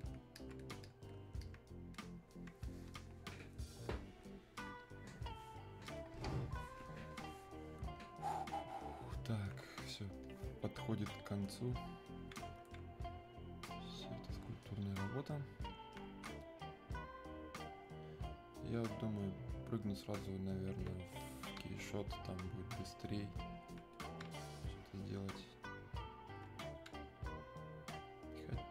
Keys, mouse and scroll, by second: 1.4-3.1 alt+drag, 3.1-6.4 alt+drag, 8.4-13.1 alt+drag, 13.1-16.7 alt+drag, 16.7-18.8 alt+drag, 18.8-21.2 alt+drag, 21.2 click, 22.6-24.0 alt+drag, 24.0 click, 24.9-28.7 alt+drag.